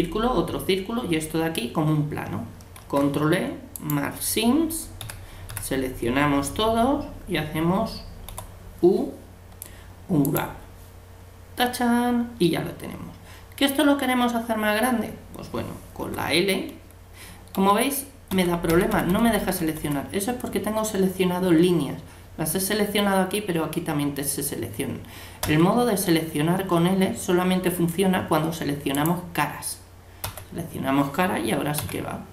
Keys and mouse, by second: 5.0 a, 5.5 a, 8.3 u, 16.0 l, 17.6 l, 19.0 l, 19.3 l, 19.7 l, 25.5 l, 29.0-31.8 drag, 30.2 l, 31.8 g.